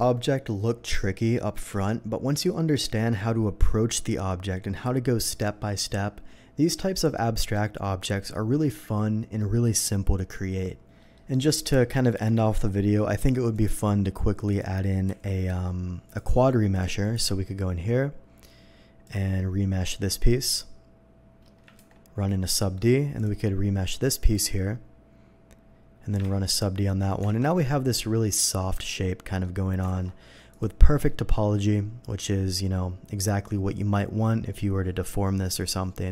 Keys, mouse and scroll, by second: 11.0 middle click, 11.5 click, 11.8 middle click, 12.1 q, 13.5 click, 13.5 q, 14.5 click, 16.0 click, 16.7 click, 17.1 n, 19.0 click, 19.0 n, 21.7 ctrl+1, 22.6 ctrl+1, 22.6 middle drag, 23.1 click, 24.2 click, 27.2 alt+a, 27.5-28.2 middle drag, 28.7-29.4 middle drag, 30.5 alt+v, 30.5 click, 31.0 middle click.